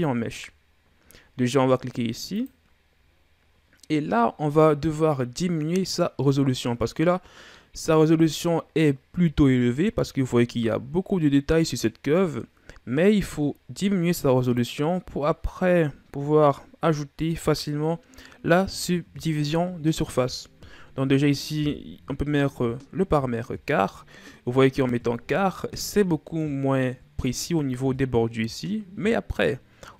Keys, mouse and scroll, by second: 2.2 drag, 3.2-6.3 scroll up 7, 9.3-11.5 shift+scroll up 3, 13.1-14.2 scroll up 3, 14.2-17.2 drag, 25.6 scroll up 1, 25.7-27.0 middle drag, 27.0-27.7 shift+scroll down 1.